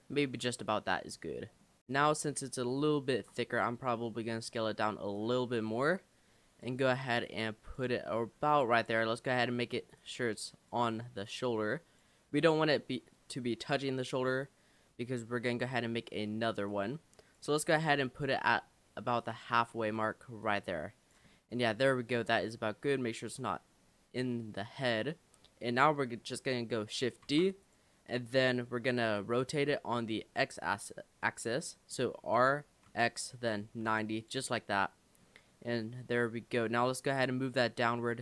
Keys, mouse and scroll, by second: 0.3-1.1 middle drag, 1.1-1.8 scroll down 3, 1.3-1.6 middle drag, 1.8 click, 2.4-3.2 middle drag, 3.2 Tab, 4.5 s, 5.2 click, 7.2 click, 8.5 click, 9.0 shift+middle click, 10.0 click, 11.2 click, 15.0-16.7 middle drag, 16.7 click, 17.8 click, 19.2 click, 19.5 shift+middle click, 20.4 click, 21.3-22.3 middle drag, 22.3 click, 27.2 shift+d, 32.4 r, 34.6 middle click, 35.5-36.5 scroll up 3, 36.7 click.